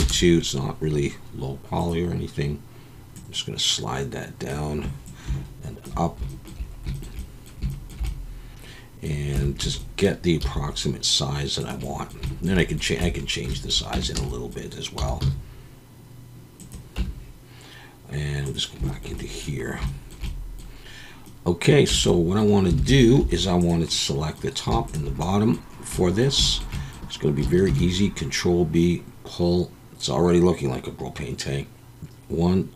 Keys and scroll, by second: 9.3 Tab, 9.6 a, 10.4 s, 13.0 Tab, 13.9 Tab, 14.2 a, 15.0 s, 15.2 z, 17.0 Tab, 21.9 Tab, 22.8 alt+a, 23.2 3, 27.7 ctrl+b, 32.0 ctrl+b.